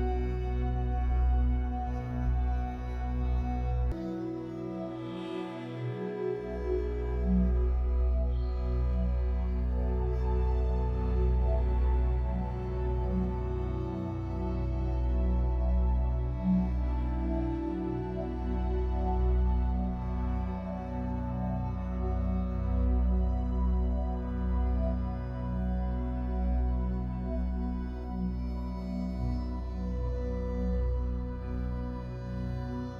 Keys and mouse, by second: 3.9-4.4 middle drag, 4.6 shift+middle click, 4.8 middle drag, 5.3 shift+middle drag, 6.7 Tab, 6.8 Tab, 7.2 click, 7.6 ctrl+s, 8.8-9.4 shift+middle drag, 10.3 alt+middle click, 10.6 alt+middle click, 10.9-11.2 alt+middle drag, 11.5 shift+middle drag, 12.1 shift+a, 28.2 s, 29.6 g, 31.8 g.